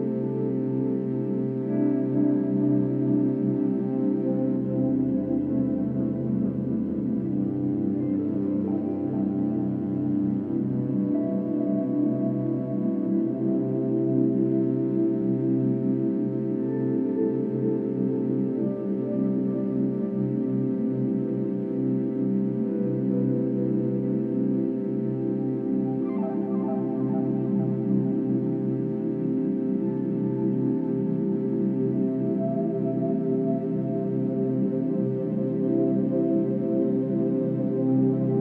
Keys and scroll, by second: 3.6 ctrl+-, 10.5 ctrl+d, 16.3 Delete, 18.2 ctrl+-, 18.3 ctrl+=, 20.5 ctrl+-, 22.1 ctrl+-, 22.2 ctrl+=, 22.4 ctrl+-, 22.5 ctrl+=, 33.2 ctrl+-, 33.4 ctrl+=.